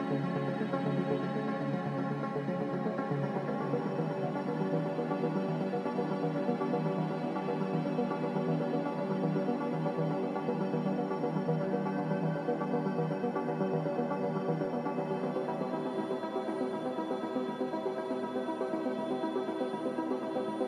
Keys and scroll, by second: 0.8 ctrl+c, 7.1 z, 7.5 Escape, 11.1 Delete, 11.7 Delete, 13.3 Delete, 15.2 a, 17.5 j, 18.8 z.